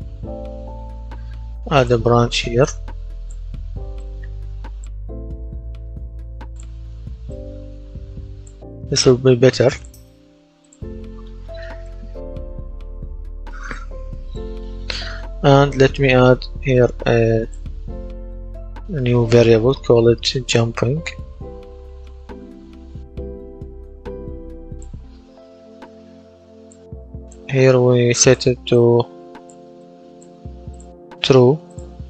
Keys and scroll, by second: 0.0-1.2 typing, 20.3-23.1 typing.